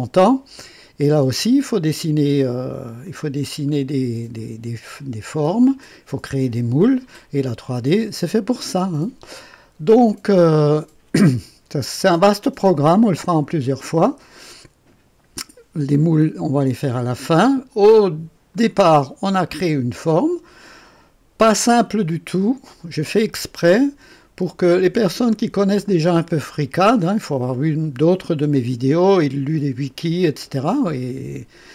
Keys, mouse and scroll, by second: 1.2-2.3 drag, 3.0-5.0 drag, 6.7-8.0 drag, 9.8-13.3 drag, 18.5 click, 19.5-21.4 drag, 21.6-24.3 drag, 24.7-27.6 drag, 28.5-31.7 drag.